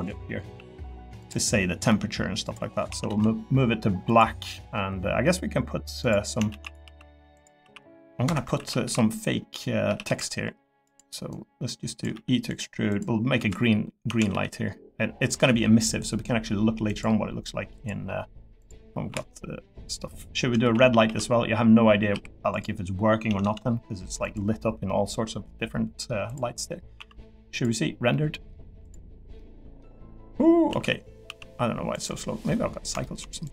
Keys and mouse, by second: 0.4 x, 1.9 e, 2.4 click, 2.9 a, 3.1 g, 4.4 click, 5.2 middle click, 6.0 click, 6.5-10.0 typing, 10.8 click, 11.3 click, 12.1 e, 12.9 click, 13.4 l, 14.1 a, 14.3 g, 19.1 l, 20.6 shift+f, 21.0 shift+d, 22.1 x, 23.3 a, 23.4 g, 24.9 middle click, 26.3 click, 27.0 z, 29.3 middle click, 30.7 z, 31.2 z, 32.5 middle click, 33.0 shift+middle click.